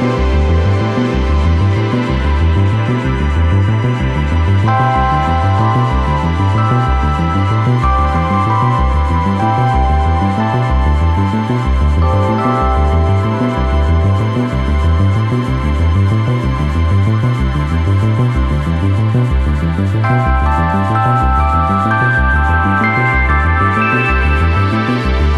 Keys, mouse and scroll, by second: 0.0 Tab, 0.2-0.9 middle drag, 0.9 drag, 2.4 z, 3.2 middle click, 3.4 KP_0, 3.9 click, 4.8-5.4 middle drag, 5.4 scroll up 1, 5.7 Tab, 5.9 middle click, 6.1 right click, 6.3 right click, 6.6 KP_0, 7.0 shift+a, 7.7 right click, 7.8 Tab, 7.9 middle click, 8.1 scroll up 5, 8.4 shift+middle click, 9.0 2, 9.1-9.8 right drag, 9.8 ctrl+b, 11.6 right click, 11.7 middle click, 12.1 right click, 12.8 middle click, 13.5 ctrl+b, 15.0-15.4 scroll down 2, 15.0 middle click, 15.4-15.8 shift+middle drag, 15.8 Tab, 16.5 scroll down 1, 16.6 KP_0, 16.9 shift+a, 17.6 g, 19.2 KP_7, 19.5 g, 20.2 s, 21.4 KP_0, 21.8 g, 23.3 Tab, 23.4 right click, 23.7 3, 24.0 g, 24.5 scroll down 1, 24.6 shift+middle click, 24.8 Tab, 25.1 right click.